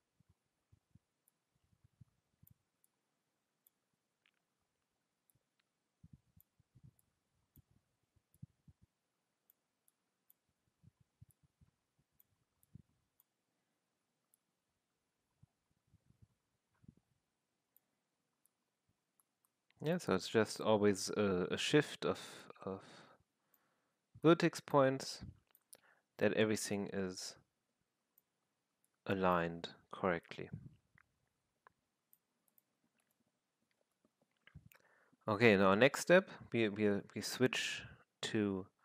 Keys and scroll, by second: 0.4 w, 3.8 r, 10.7 w, 13.9 r, 17.8 w, 21.0 r, 23.6 w, 26.0 r.